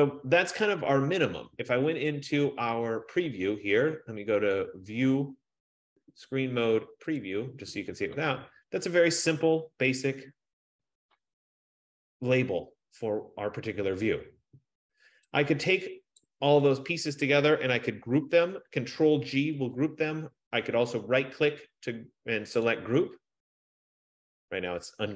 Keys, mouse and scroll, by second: 2.3 click, 7.3 click, 8.4-12.3 drag, 16.4 click, 19.7 ctrl+g, 23.1 right click.